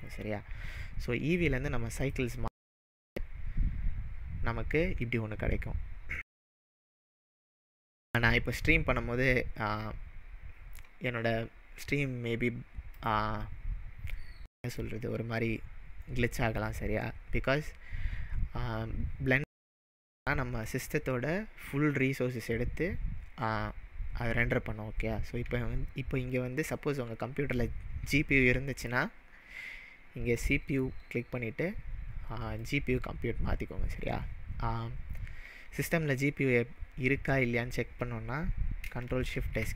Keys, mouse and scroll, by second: 2.0 click, 6.4-8.7 scroll up 1, 8.7-9.1 scroll up 1, 11.8 click, 14.2-14.9 middle drag, 15.2-16.2 scroll up 2, 16.2-17.1 scroll up 1, 17.1-18.1 scroll up 1, 30.4-33.4 drag.